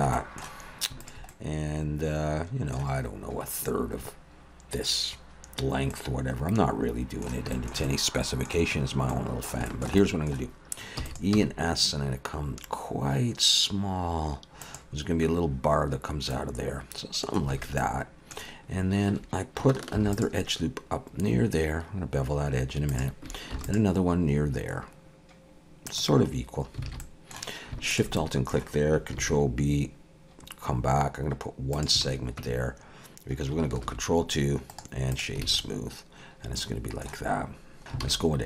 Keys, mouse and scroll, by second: 0.1 middle click, 1.0 alt+shift+click, 1.3 middle click, 5.9 middle click, 7.5 shift+middle click, 7.8 middle click, 9.1 middle click, 9.7 shift+middle click, 10.0 middle click, 11.0 e, 11.3 s, 16.3 middle click, 17.5 alt+a, 17.8 middle click, 20.0 ctrl+r, 23.5 ctrl+r, 26.9 alt+a, 27.0 middle click, 27.9 alt+shift+click, 28.2 middle click, 29.2 ctrl+b, 32.0 alt+a, 32.4 Tab, 33.8 ctrl+2, 34.7 right click, 35.4 alt+a, 35.6 middle click, 38.0 alt+a.